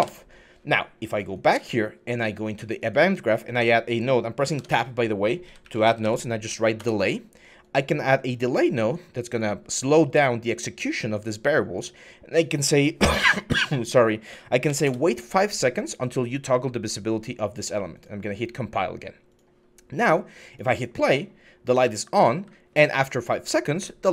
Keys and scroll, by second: 4.4 Tab, 5.3-5.8 typing, 6.6 Return, 14.5 5, 14.6 Return, 21.6-22.2 typing.